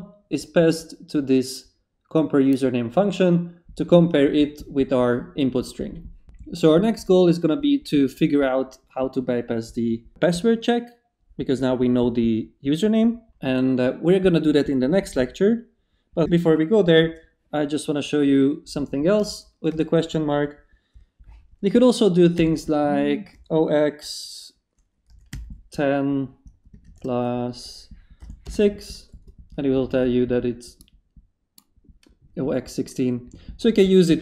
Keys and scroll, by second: 13.4 Down, 19.2 shift+/, 19.7 shift+space, 20.4 space, 22.3-23.8 typing, 24.8-25.8 typing, 26.8 shift+=, 28.2 6, 28.4 Return.